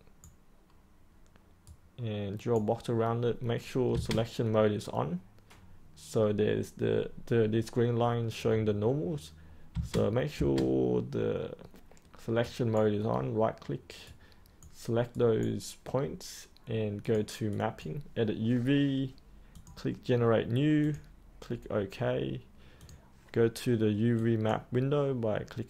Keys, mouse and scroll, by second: 4.1 space, 11.2 space, 12.4-16.3 right drag, 17.0-25.4 drag.